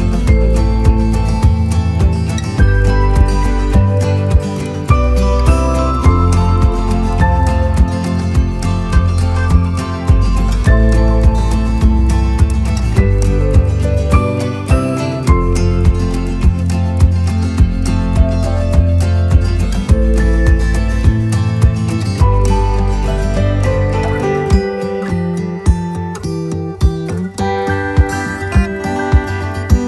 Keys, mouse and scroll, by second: 2.9 click, 4.1 right click, 5.5 click, 8.0-12.1 right drag, 12.3 right click, 13.1-16.2 right drag, 17.1 click, 18.5 right click, 19.7 right click, 21.3 click, 22.2 click, 22.9 shift+click, 25.1 click, 27.7 click, 28.1 right click, 29.3 right click.